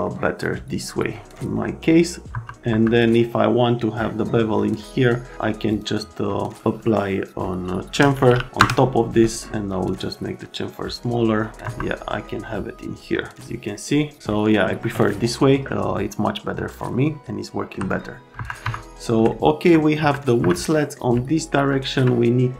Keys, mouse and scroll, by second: 0.1 right click, 1.5 right click, 2.3 F3, 2.7 F3, 5.7 click, 7.9-8.9 typing, 9.7 click, 11.5 middle click, 11.6 F3, 17.2 alt+middle click, 18.4 F3, 18.6 F3, 20.0 F3, 20.4 F3, 20.7 middle click, 21.3 alt+middle click.